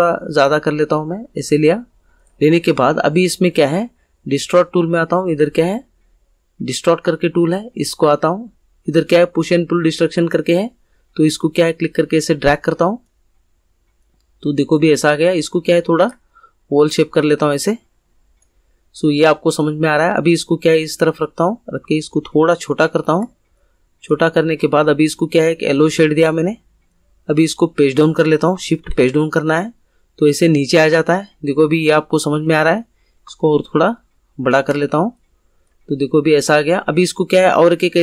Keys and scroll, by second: 28.8 shift+Page_Down.